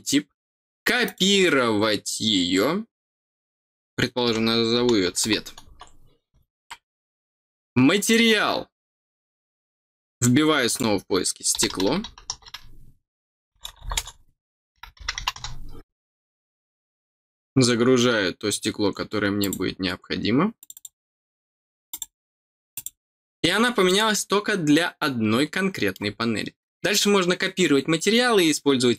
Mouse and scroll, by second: 1.0 click, 7.9 click, 10.6 click, 16.4 scroll down 1, 17.0 scroll down 1, 17.5-18.3 scroll down 2, 19.3 click, 20.5 click, 21.8 click, 22.7 click, 23.8-25.9 middle drag.